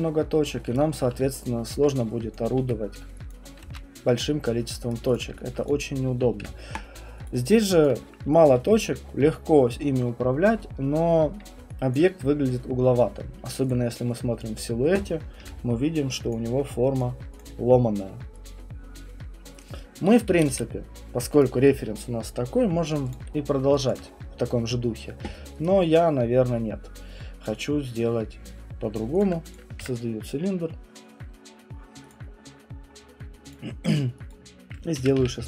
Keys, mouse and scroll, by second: 0.8 right click, 1.7 alt+click, 2.3 click, 2.6 w, 3.3 click, 3.6 ctrl+z, 4.9 right click, 5.1 click, 5.5 alt+click, 5.7 click, 6.4 Delete, 7.2 click, 7.8 click, 8.5 alt+click, 11.9 alt+click, 13.7 click, 14.4 alt+click, 15.4 Print, 16.3 click, 17.0 click, 17.1 alt+click, 17.4 click, 18.7 alt+click, 19.6 click, 20.3 Escape, 21.4 right click, 23.2 click, 23.9 alt+click, 25.6 right click, 27.6 click, 29.2 click, 29.5 click, 29.8 Delete, 32.1 click, 33.5 click, 34.3 click, 34.7-35.4 typing.